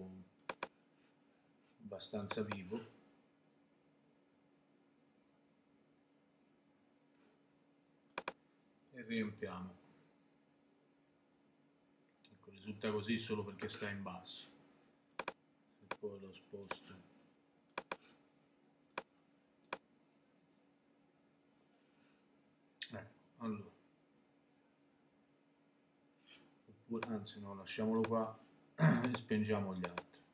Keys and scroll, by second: 9.5 super+BackSpace.